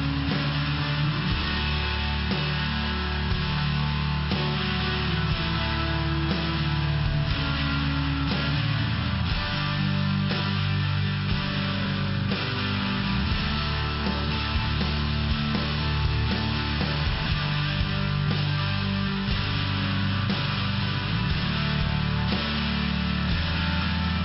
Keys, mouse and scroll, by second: 0.4 click, 0.9 click, 1.4 click, 3.0 click, 4.6 click, 4.7 click, 5.3 click, 5.8 click, 6.3 click, 6.8 click, 6.9 click, 7.3 click, 8.6 click, 9.1 click, 9.9 click, 10.4 click, 10.4 double click, 11.0 double click, 11.4 double click, 12.6 click, 13.2 click, 13.6 click, 14.2 click, 14.8 click, 15.3 click, 15.9 click, 17.2 click, 21.7 click, 23.3 click, 23.8 click.